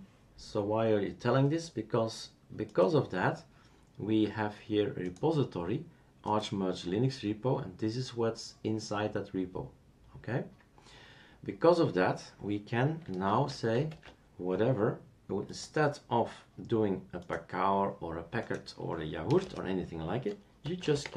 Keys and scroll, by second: 13.3 super+q, 13.9 super+q, 19.2 BackSpace, 19.4 BackSpace, 20.7-21.1 typing.